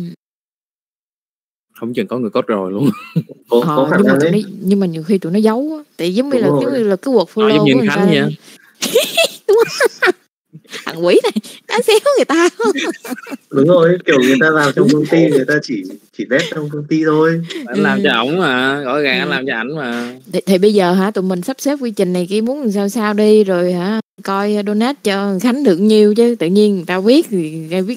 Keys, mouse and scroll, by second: 14.9 click, 16.2 middle click, 16.8 middle click, 18.3 middle click, 19.2 click, 19.7 middle click, 23.8 middle click, 26.1 middle click, 26.7 middle click, 27.5 click.